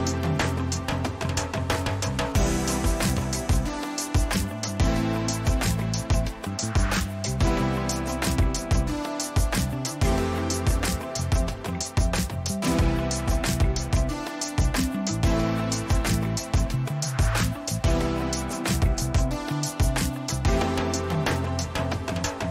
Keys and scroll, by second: 5.2 t, 6.3-7.5 typing, 9.1 r, 18.8 ctrl+a.